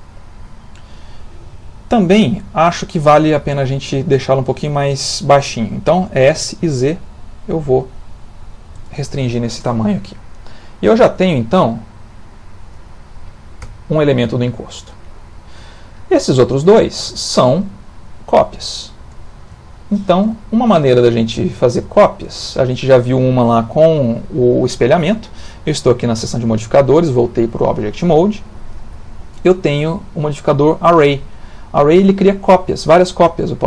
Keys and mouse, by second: 6.3 s, 9.3 ctrl+middle click, 9.8 middle click, 13.6 Tab, 16.2 shift+middle click, 16.8 ctrl+middle click, 17.1 shift+middle click, 17.7 ctrl+middle click, 19.8 shift+middle click, 20.4 shift+middle click, 20.5 shift+middle click, 20.9 ctrl+middle click, 21.4 shift+middle click, 28.6 click, 33.4 click.